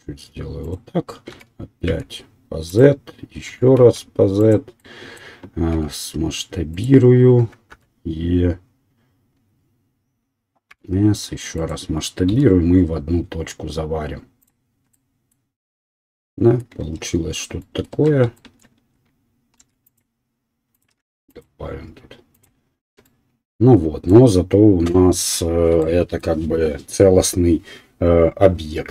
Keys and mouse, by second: 3.8 e, 4.0-7.8 middle drag, 5.9 s, 7.8 e, 8.8 middle click, 12.4 m, 12.6-18.0 middle drag, 17.0 Tab, 18.0 Tab, 18.2 shift+middle click, 19.7 ctrl+r, 21.0 ctrl+r, 23.0 Tab, 23.0-24.0 middle drag, 24.0 right click, 24.2-28.9 middle drag.